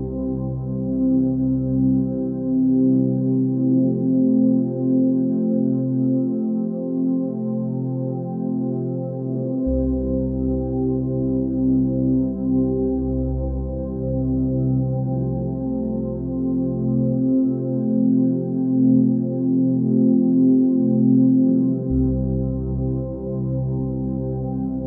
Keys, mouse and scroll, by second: 2.4 alt+click, 4.3 g, 8.4-9.9 middle drag, 9.9 KP_1, 11.3 a, 12.1 s, 22.3-23.4 middle drag, 23.4 scroll down 2, 24.4 KP_1.